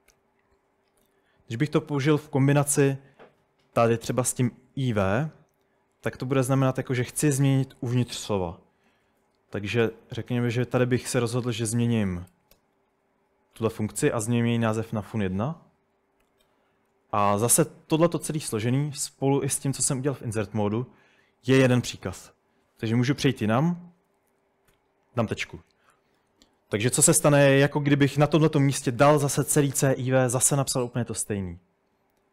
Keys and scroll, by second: 0.0-1.6 typing, 6.8-7.2 typing, 8.9-10.8 typing, 12.1-12.6 typing, 14.5-15.3 typing, 16.3 Escape, 23.0-23.6 typing, 24.7 typing, 27.5-29.0 typing.